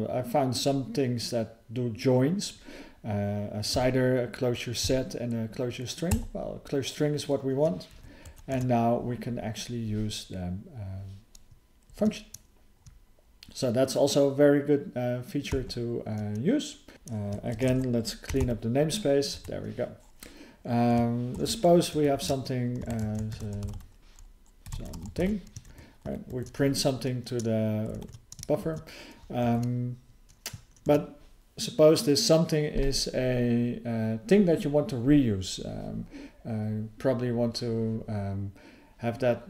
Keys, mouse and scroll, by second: 8.5 ctrl+e, 15.5 ctrl+k, 21.4 (, 22.9 ", 24.6 BackSpace, 26.3 ctrl+e, 28.0 ctrl+s, 29.4 alt+f.